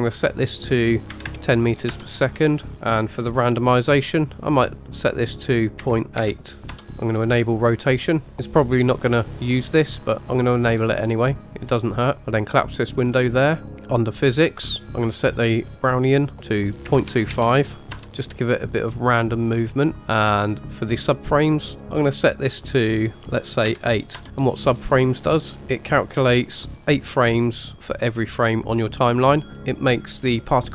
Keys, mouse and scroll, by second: 0.1-1.9 drag, 4.5-6.9 drag, 7.2 click, 7.8 click, 10.4 click, 11.6 click, 12.4 click, 12.9-13.6 scroll down 4, 13.8 click, 14.6-16.3 scroll down 3, 16.3-17.9 drag, 22.5-24.2 drag.